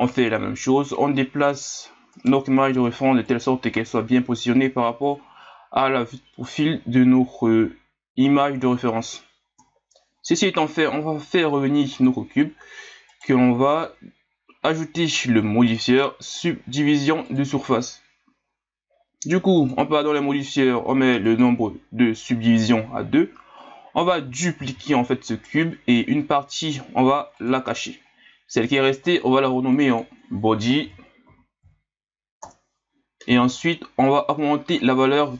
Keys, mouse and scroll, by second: 2.1 right click, 3.2-6.3 drag, 9.5 KP_1, 11.9 click, 13.1-15.7 right drag, 15.7-16.4 drag, 19.7-20.3 drag, 21.2-24.2 drag, 24.6 shift+d, 27.4 click, 28.6 right click, 29.7 click, 29.9-33.0 drag.